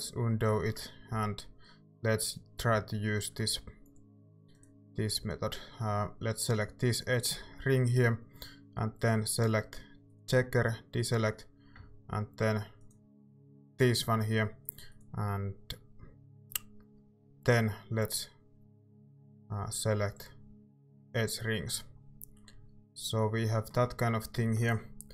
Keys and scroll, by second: 1.1 a.